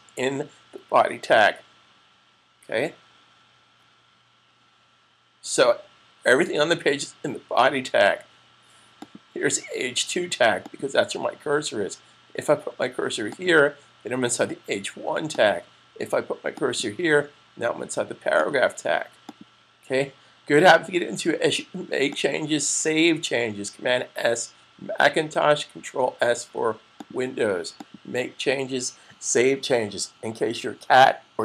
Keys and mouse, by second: 8.8 click, 13.2 click, 22.2 click, 26.8 click.